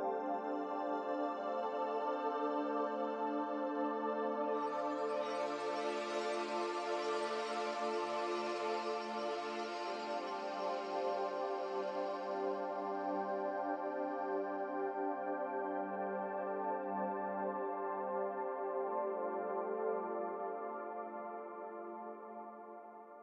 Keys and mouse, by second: 1.0-2.9 middle drag, 3.3-4.3 middle drag, 6.6 ctrl+s.